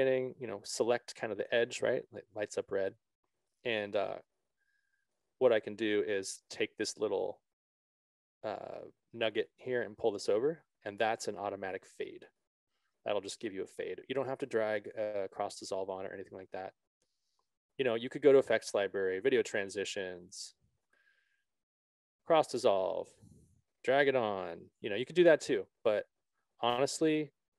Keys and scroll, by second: 4.3 ctrl+d.